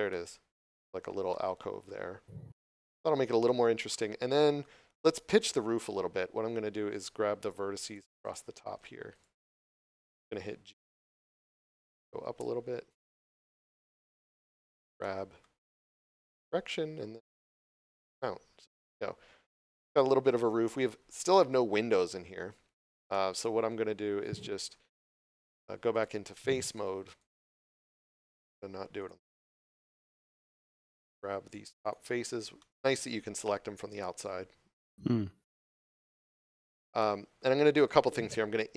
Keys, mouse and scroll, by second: 0.0 middle click, 1.2 shift+middle click, 3.4 scroll down 1, 3.8 middle click, 7.3 right click, 9.0 shift+right click, 10.5 g, 14.8 scroll up 1, 14.9 shift+middle click, 15.5 middle click, 21.6 scroll up 1, 22.6 scroll down 1, 23.0 middle click, 23.6 scroll up 1, 24.5 3, 25.3 right click, 25.8 shift+right click, 26.2 shift+right click, 26.6 shift+right click, 27.0 shift+right click, 27.3 scroll down 1, 27.6 middle click, 29.2 middle click, 30.5 shift+right click, 30.9 shift+right click, 31.3 shift+right click, 31.7 shift+right click, 32.4 scroll down 1, 32.5 middle click, 36.0 middle click.